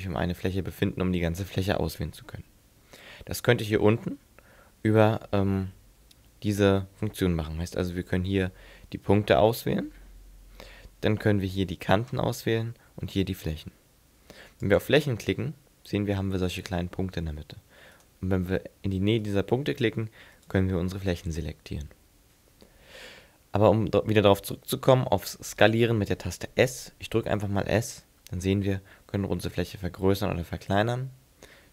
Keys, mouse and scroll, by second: 14.7 click, 18.0 right click, 19.3 right click, 20.4 right click, 27.7 s.